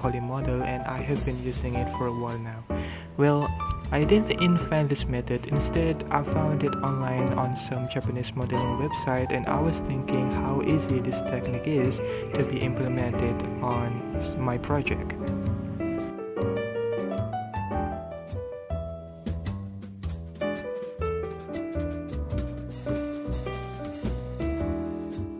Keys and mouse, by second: 0.0-0.9 typing, 0.2 alt+a, 0.3 middle click, 0.3 alt+a, 0.7 alt+a, 0.9 shift+middle click, 1.0 middle click, 1.1 click, 1.4 alt+a, 1.4 middle click, 2.1 ctrl+middle click, 2.2 click, 2.6 shift+middle click, 3.1 middle click, 3.1 ctrl+drag, 3.2 ctrl+middle click, 3.3 alt+a, 3.3 ctrl+z, 3.4 alt+a, 3.4 ctrl+z, 4.1 ctrl+middle click, 4.3 ctrl+middle click, 4.5 middle click, 4.9 middle click, 5.3 middle click, 5.3 click, 5.5 KP_3, 5.5 ctrl+middle click, 5.6 g, 6.7 ctrl+z, 6.8 ctrl+z, 7.4 g, 9.0 ctrl+KP_1, 9.1 Tab, 9.2 middle click, 9.4 alt+h, 9.5 KP_3, 9.5 Tab, 9.6 g, 10.4 ctrl+Tab, 10.5 shift+middle click, 10.6 g, 10.7 shift+middle click, 10.7 click, 11.3 ctrl+middle click, 11.3 Tab, 11.4 KP_1, 11.4 ctrl+middle click, 11.5 Tab, 11.6 ctrl+middle click, 11.8 shift+middle click, 12.0 Tab, 12.1 ctrl+s, 12.5 Tab, 12.5-14.1 typing, 12.6 ctrl+click, 12.8 ctrl+click, 13.1 ctrl+click, 13.3 ctrl+z, 13.6 ctrl+s, 13.9 middle click, 14.6 click, 15.6-19.1 typing, 15.8 ctrl+middle click, 16.9 Tab, 17.1 Tab, 17.2 Tab, 17.9 shift+middle click, 19.1 ctrl+z, 19.5 ctrl+g, 19.5 ctrl+middle click, 19.5 Tab, 19.7 middle click, 19.8 middle click, 19.9 Tab, 20.1-22.3 typing, 20.2 Tab, 20.2 Tab, 20.2 middle click, 20.5 ctrl+click, 20.5 Tab, 20.7 ctrl+z, 20.9 click, 21.1 ctrl+s, 21.2 ctrl+click, 21.8 ctrl+KP_3, 22.3 ctrl+shift+c, 22.5 shift+middle click, 22.8 middle click, 22.8 alt+c, 23.0 ctrl+click, 23.5-24.5 typing, 23.8 ctrl+`, 24.1 middle click.